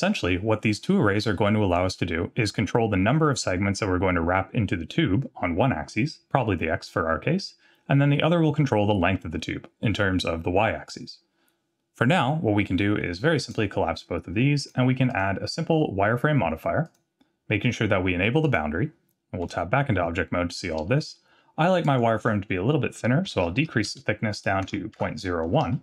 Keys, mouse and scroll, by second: 2.1-2.5 scroll down 1, 13.4 click, 14.6 click, 15.1-16.9 drag, 18.4 click, 19.5 Tab, 21.8-25.8 drag, 23.5 KP_0, 25.0 BackSpace.